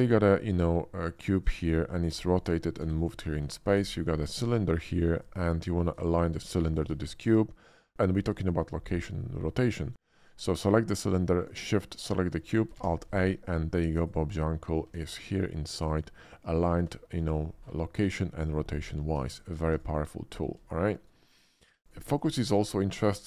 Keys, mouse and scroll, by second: 1.1 click, 1.6 middle click, 2.0 r, 2.3 click, 2.8 g, 3.0 click, 3.7 shift+a, 5.1 click, 5.7 shift+middle drag, 6.6 click, 6.6 g, 7.0 middle click, 10.4 click, 11.4 shift+click, 11.8 shift+middle click, 12.7 alt+a, 14.0 click, 14.2 click, 14.8 s, 15.8 click, 17.2-19.2 drag, 19.3 shift+click, 19.6 z, 19.7 click, 19.7 x, 20.7 shift+middle drag, 21.8 click, 21.8 g, 22.3 shift+d, 23.1 click.